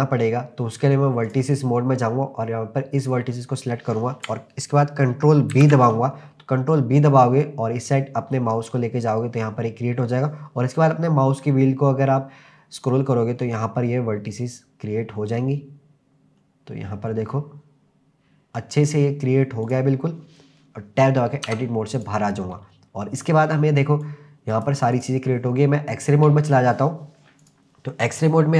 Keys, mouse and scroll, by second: 1.3 click, 2.0-3.0 scroll down 1, 3.0 click, 5.5 ctrl+b, 12.7-14.0 scroll up 5, 14.2-17.2 scroll up 2, 19.6 click, 21.5 Tab, 22.0 click, 22.9-24.0 scroll down 1, 24.0 click, 25.0 click, 27.4 click, 27.9-28.5 scroll up 3.